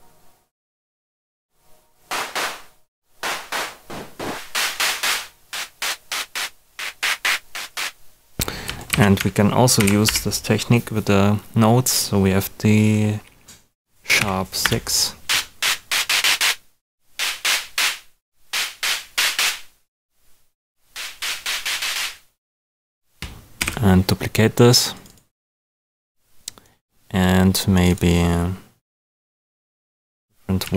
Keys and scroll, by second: 8.9 super+a, 9.7 shift+super+d, 10.9 #, 14.1 6, 14.6 Return, 23.5 super+d.